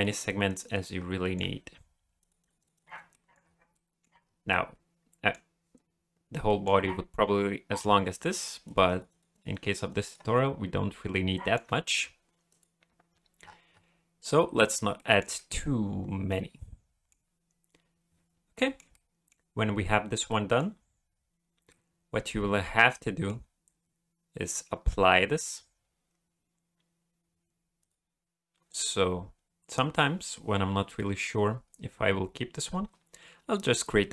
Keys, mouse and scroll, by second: 0.3 click, 0.5 click, 0.6 click, 0.9 scroll down 2, 1.2 shift+middle click, 2.2 click, 2.4 click, 2.6 click, 2.7 click, 3.1 middle click, 3.4 scroll up 2, 3.7 middle click, 4.2 scroll down 2, 4.5 middle click, 6.5 middle click, 8.6 click, 8.9 click, 9.1 click, 9.3 click, 9.5 click, 9.7 click, 9.9 click, 10.0 click, 10.3-10.8 scroll up 1, 10.8-11.3 scroll up 1, 11.4 shift+middle click, 12.5 click, 13.4-13.9 scroll up 4, 15.0 shift+middle click, 15.3 middle click, 18.5 shift+middle click, 18.8 shift+scroll down 1, 18.9 middle click, 20.3 middle click, 21.1 scroll down 1, 21.7 middle click, 27.8 click.